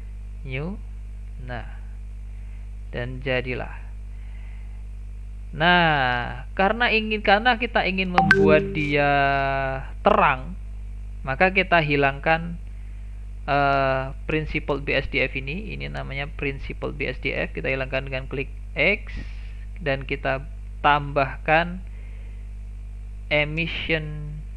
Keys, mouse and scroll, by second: 1.3 middle click, 2.0-2.6 scroll up 7, 2.6 shift+middle click, 2.9 shift+scroll up 1, 3.2 scroll down 2, 3.4-4.8 shift+middle drag, 4.8 click, 6.3 click, 12.8 click, 15.4-16.5 scroll up 8, 16.5-17.4 scroll up 3, 17.4 click, 18.3 x, 21.3 shift+a.